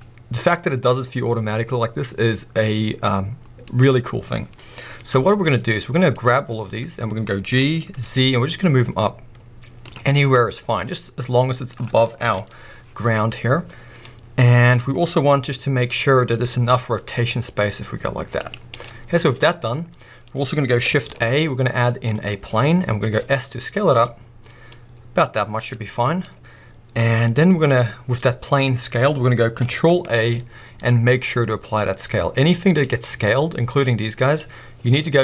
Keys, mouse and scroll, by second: 0.8-6.5 middle drag, 4.5-5.5 scroll down 2, 5.5 scroll down 1, 6.1-6.5 scroll up 2, 6.5 click, 7.5 g, 9.9 click, 10.1 scroll down 2, 10.3-15.1 middle drag, 12.2 KP_1, 12.8-15.1 scroll up 2, 15.1 scroll down 1, 16.3-18.5 middle drag, 16.3 r, 18.5 right click, 18.9-19.7 middle drag, 19.7-21.1 scroll down 2, 21.1 shift+a, 22.4 scroll down 1, 23.1-24.7 middle drag, 23.1 s, 25.4 click, 25.4 scroll down 2, 25.6-26.0 middle drag, 26.2 scroll up 1, 27.5 middle click, 28.0-30.2 scroll down 2, 30.2 ctrl+a, 32.3 scroll up 1, 32.7 click, 33.1 s, 34.4 right click, 35.1 ctrl+a.